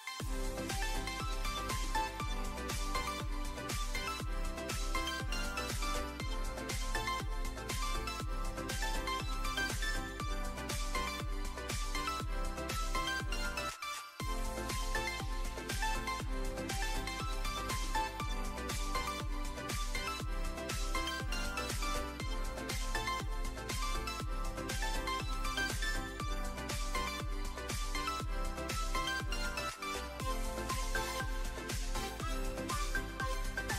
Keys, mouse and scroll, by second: 0.4 click, 0.6 e, 0.9 z, 1.6 s, 2.8 Tab, 3.5 shift+middle drag, 3.9 `, 5.2 click, 7.3 click, 8.7 shift+middle click, 9.1 s, 10.2 middle click, 11.0 click, 11.4-12.0 drag, 12.2 drag, 12.6-13.6 alt+middle drag, 13.7 `, 14.4 drag, 14.9 s, 16.6 click, 19.6 click, 19.9 `, 21.6 click, 22.5 shift+middle click, 23.5 shift+a, 25.7 s, 25.8 z, 26.5 click, 26.8 g, 27.2 click, 27.4 s, 28.0 `, 29.9 ctrl+1, 31.2-31.9 right drag.